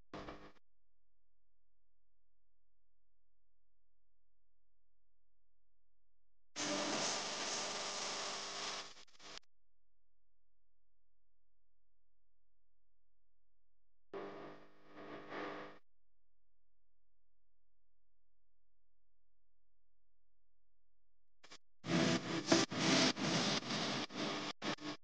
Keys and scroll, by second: 5.5 a, 14.1-15.4 typing, 16.5 r, 21.2 a.